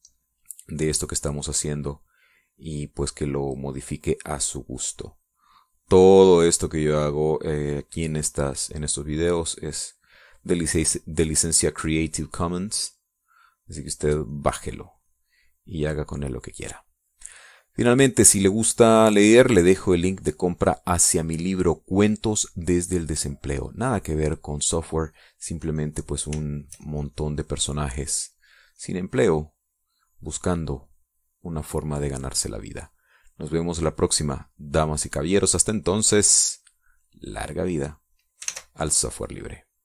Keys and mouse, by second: 0.3 click, 1.4-11.8 drag, 12.6-16.1 drag, 16.7 click, 17.7-19.3 drag, 19.5 click, 20.5 click, 21.5 click, 24.0 click, 26.8-28.1 drag, 32.2-33.3 shift+drag, 33.6-39.7 drag.